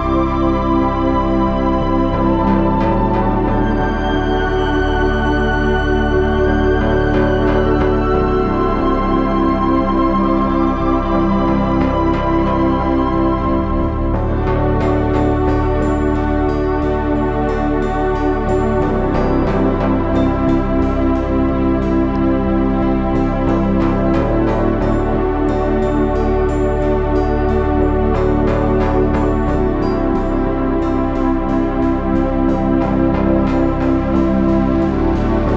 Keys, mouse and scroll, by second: 0.0 KP_3, 3.3 z, 5.5-7.0 middle drag, 7.2-9.0 drag, 17.0 KP_1, 17.6 z, 19.1 z, 19.6 Tab, 19.9 Tab, 23.1 Tab, 24.9 KP_3, 25.2 z, 26.4 Tab, 27.4 KP_1, 28.9 c, 30.7 s, 32.8 Tab, 33.0 z, 35.4 KP_1.